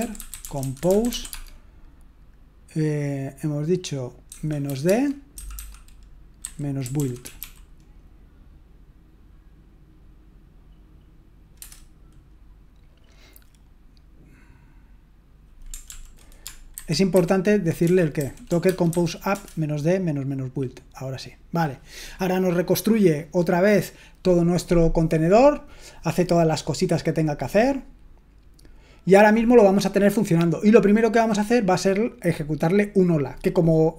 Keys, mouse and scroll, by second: 0.0-1.8 typing, 5.3-7.9 typing, 15.9 ctrl+p, 16.8 alt+b, 17.1 alt+b, 17.8-19.8 typing.